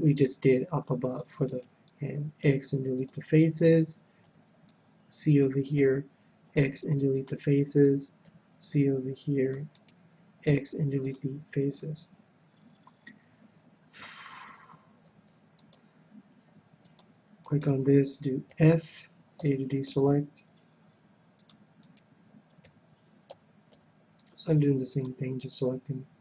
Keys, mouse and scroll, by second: 0.0 c, 1.5-3.4 right drag, 2.4 x, 4.3 c, 5.6-7.6 right drag, 6.5 x, 8.3 c, 9.8-11.7 right drag, 10.4 x, 15.0 c, 17.5-19.3 right drag, 18.5 f, 19.3 a, 19.8 c, 21.9-23.7 right drag, 22.6 f, 23.2 a, 23.7 c.